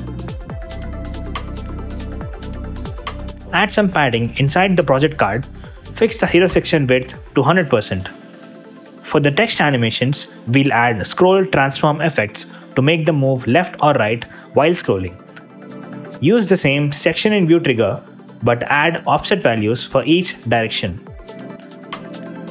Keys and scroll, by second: 3.0 super+z, 4.3 Return, 18.5 -, 19.1 0, 19.2 Return.